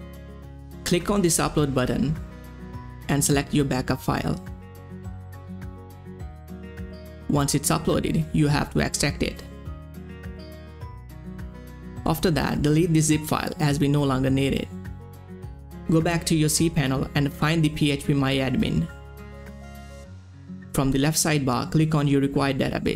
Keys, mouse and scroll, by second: 2.9-7.0 drag, 8.5 click, 8.5 click, 11.5 click, 15.8 click, 16.5 scroll down 1, 17.1 scroll up 1, 19.3 scroll down 1, 19.4 click, 22.1 click, 22.1 click.